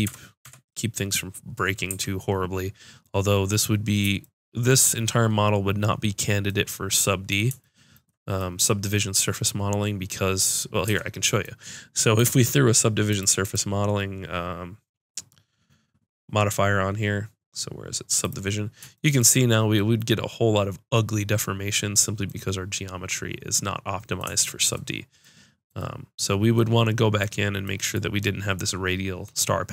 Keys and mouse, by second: 0.0 Tab, 0.4 Tab, 1.9 a, 10.9 Tab.